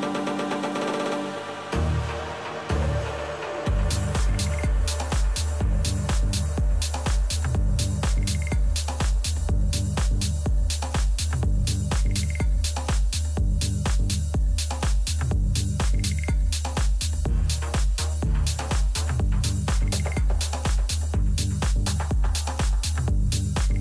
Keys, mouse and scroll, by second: 0.2-3.9 right drag, 0.6 middle click, 3.9 Delete, 8.7-11.7 typing, 13.1 b, 18.2-20.8 middle drag, 19.2 Delete, 21.0-22.9 middle drag, 21.9 z.